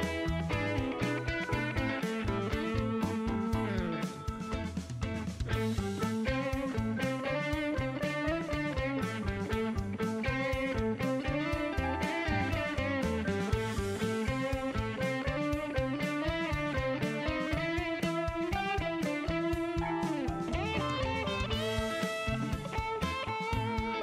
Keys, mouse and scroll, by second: 0.7 shift+scroll up 1, 1.4 shift+right click, 2.3 shift+scroll up 1, 2.9 shift+right click, 3.2 shift+middle click, 3.4 shift+scroll up 1, 5.5-5.9 scroll down 2, 6.1 shift+right click, 7.6 shift+right click, 11.0 shift+right click, 12.5 click, 13.8 click, 15.6 middle click, 16.0 shift+right click, 16.9 shift+right click, 18.9 shift+right click, 20.1 shift+right click, 22.1 shift+right click, 23.6 shift+right click.